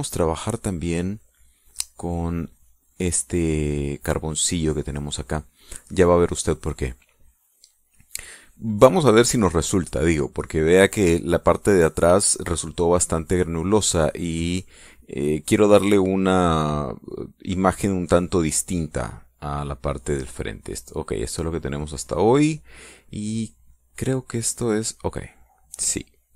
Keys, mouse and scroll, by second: 3.3 click, 20.3 click, 20.8 click, 21.9-23.4 drag, 24.4 click, 24.8 click, 25.8 click, 26.2 click.